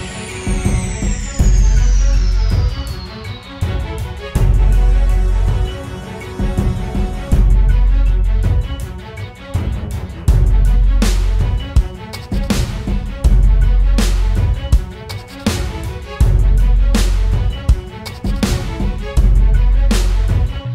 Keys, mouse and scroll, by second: 6.8-7.5 scroll down 1, 7.5 scroll up 1, 7.8-11.4 scroll down 1, 13.7-15.7 typing.